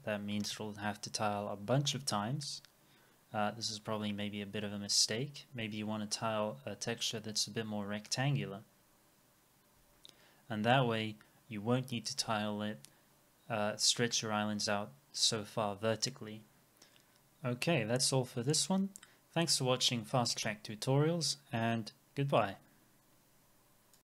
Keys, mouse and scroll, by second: 5.1-7.2 scroll down 1.